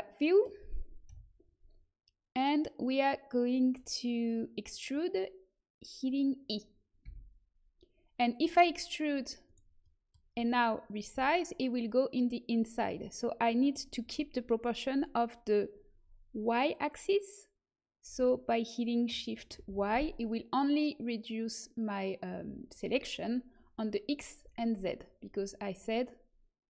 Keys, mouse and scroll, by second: 1.0 KP_1, 7.0 e, 11.1 s.